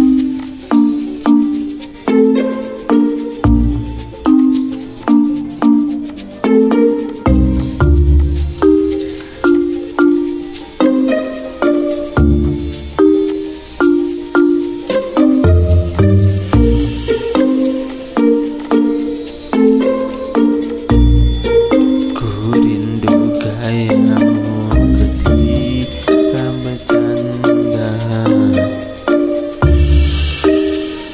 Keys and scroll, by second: 4.1 x, 6.1-7.1 typing, 8.2 z, 9.6 v, 10.6 Escape, 11.5 ctrl+z, 12.2 F9, 14.1-15.5 typing, 19.9 z, 21.1-21.9 typing, 25.1 Escape, 26.7 typing, 28.4-30.9 typing.